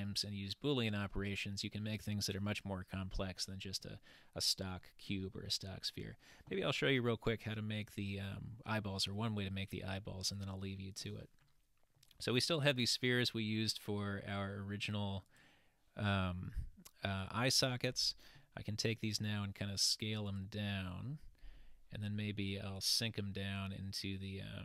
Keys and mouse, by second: 4.9-6.0 middle drag, 10.3 click, 11.5-12.1 middle drag, 14.5-14.9 middle drag, 21.1-21.8 middle drag, 22.8-24.6 drag.